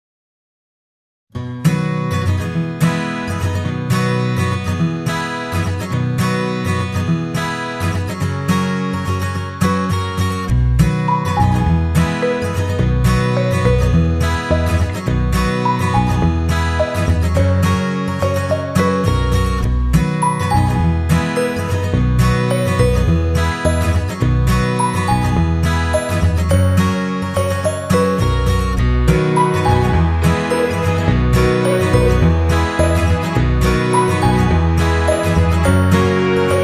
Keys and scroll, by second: 0.5 ctrl+], 2.3 ctrl+], 22.6 ctrl+[, 33.8 Down.